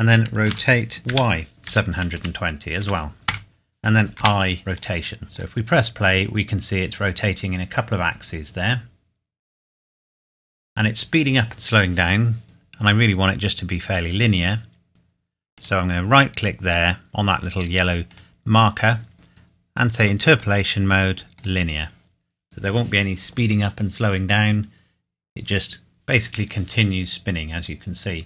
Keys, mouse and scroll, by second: 0.4-2.8 typing, 3.3 KP_Enter, 4.1 i, 4.9 click, 15.5 right click, 18.1 right click, 21.3 click, 27.1-28.2 scroll up 1.